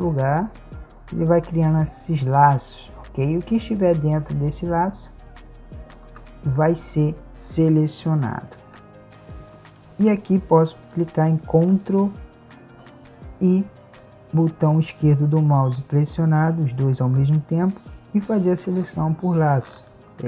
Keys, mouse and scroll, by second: 8.8 Tab, 14.4-16.5 drag.